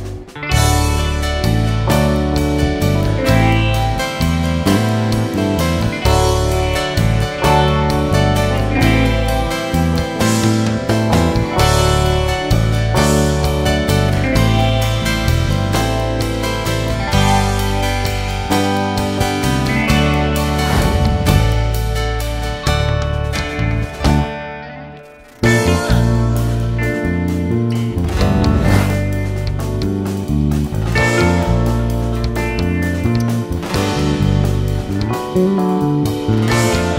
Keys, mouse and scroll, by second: 0.0 click, 4.8 alt+a, 6.0 Tab, 6.6 KP_1, 7.4-7.8 scroll up 2, 7.8 alt+a, 8.3-9.9 shift+middle drag, 9.9-13.3 shift+right drag, 13.8 Tab, 14.3 s, 18.7 click, 21.3-23.7 drag, 27.5 click, 28.0 Tab.